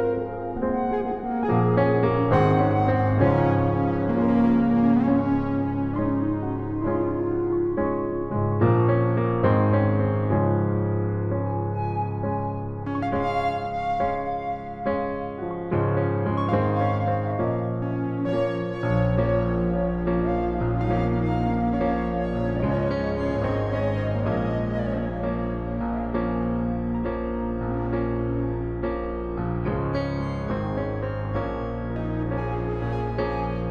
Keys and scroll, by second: 14.1 ctrl+shift+z, 14.6 ctrl+shift+t, 18.7 alt+shift+Return.